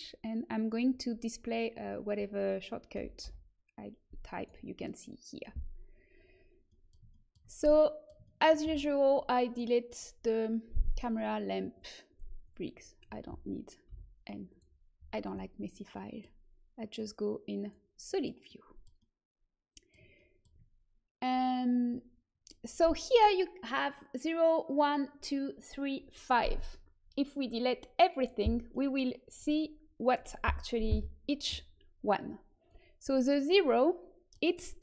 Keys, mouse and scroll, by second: 1.9-2.9 middle drag, 2.9 l, 4.3-6.2 drag, 6.2-9.4 middle drag, 9.4-13.8 drag, 13.8 Delete, 16.9 click, 17.4-18.6 drag, 18.6-24.3 middle drag, 27.4-29.1 drag, 28.7 middle click, 32.6-34.4 drag, 33.3-34.8 middle drag.